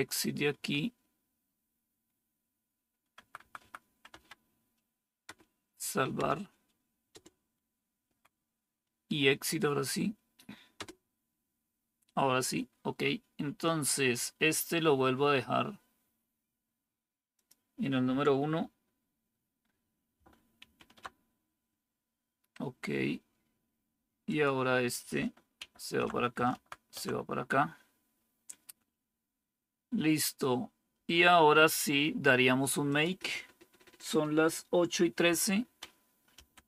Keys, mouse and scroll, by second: 0.4 Right, 3.0 Right, 3.3 Right, 3.7 Right, 4.0 Left, 5.1 Return, 6.0 Return, 7.0 Return, 7.9 Right, 10.6 Return, 20.5 super+!, 25.5 shift+super+Right, 26.4 shift+Right, 36.0-36.6 typing.